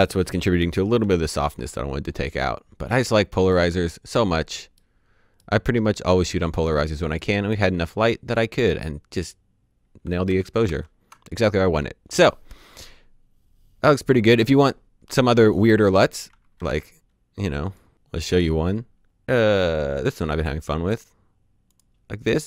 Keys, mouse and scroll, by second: 0.5-0.9 typing, 2.1-3.4 scroll up 1, 3.4 middle click, 5.7-6.6 scroll down 1, 6.6 middle click, 8.0-8.6 scroll down 1, 8.6 middle click, 9.3-9.9 scroll down 1, 10.2 d, 10.6 d, 16.5 s, 17.6 right click, 19.9 click, 21.6 click.